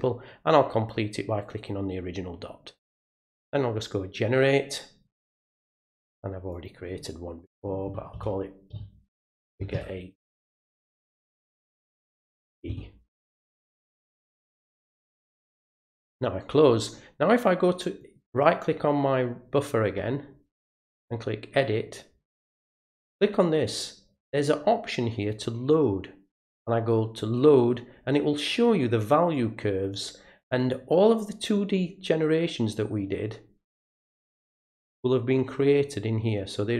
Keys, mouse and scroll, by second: 1.4 click, 1.6 click, 3.4 click, 6.5 click, 15.9 click, 18.0 right click, 20.9 click, 23.1 click, 26.3 click, 29.3 click, 30.6 click, 34.6 click.